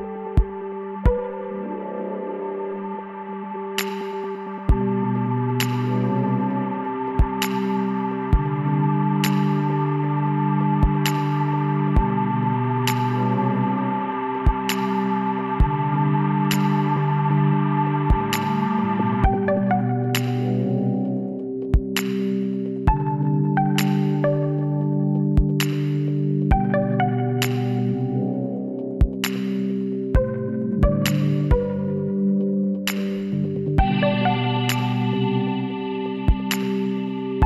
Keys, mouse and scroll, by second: 2.3 ctrl+r, 5.3 click, 5.5-8.8 middle drag, 8.8 Tab, 12.0 middle click, 12.8 Tab, 13.5 ctrl+z, 13.7 ctrl+z, 14.0 ctrl+z, 14.4 ctrl+z, 15.4 Tab, 18.7 m, 20.2-21.6 middle drag, 21.6-23.3 drag, 23.3-26.9 middle drag, 30.7-35.3 middle drag, 35.3-37.0 right drag, 36.8 m.